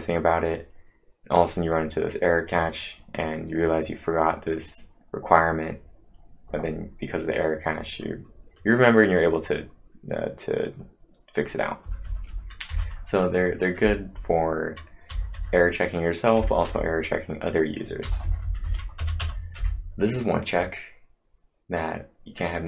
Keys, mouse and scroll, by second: 11.8 click, 11.8 scroll up 1, 12.0 Down, 12.3 Down, 12.7 Up, 14.1 Down, 15.1 Up, 15.4 Up, 18.1 Down, 18.2 Down, 19.0 Up, 19.2 Up.